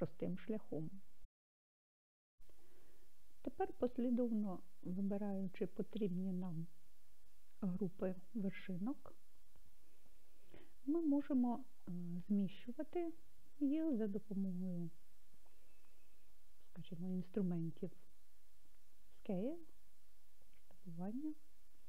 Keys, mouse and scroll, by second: 4.9 click, 6.5-8.5 drag, 20.6 s.